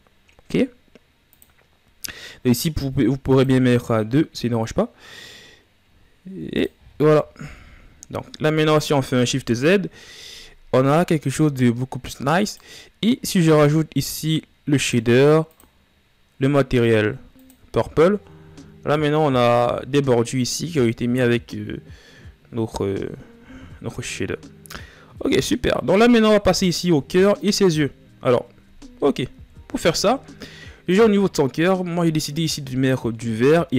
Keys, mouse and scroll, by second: 3.1-6.6 drag, 6.6 a, 6.8 scroll down 1, 7.1 a, 7.6-8.3 scroll up 1, 8.3 shift+z, 10.6-11.0 scroll down 3, 12.2 right click, 14.4-18.0 drag, 18.0 a, 26.2-27.8 right drag, 28.2 shift+z, 29.6 ctrl+s, 30.6-31.6 drag, 31.6-32.6 scroll down 10, 32.6-33.3 scroll up 3, 33.6-33.7 scroll down 1.